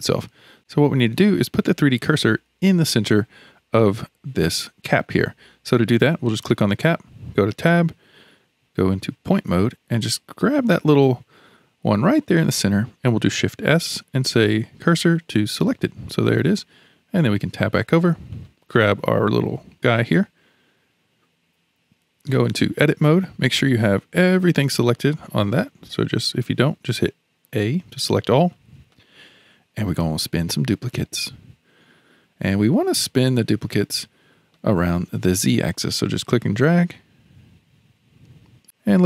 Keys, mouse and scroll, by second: 5.9 click, 7.2 Tab, 9.1 1, 10.0 click, 13.4 shift+s, 17.3 Tab, 18.3 click, 22.7 Tab, 24.0-26.4 middle drag, 26.4 alt+a, 27.4 a, 28.5-29.9 shift+middle drag, 29.9-30.9 scroll down 1, 30.9-32.6 drag, 32.6 middle click, 33.3-34.0 scroll down 6, 34.0-35.9 middle drag, 35.9 click.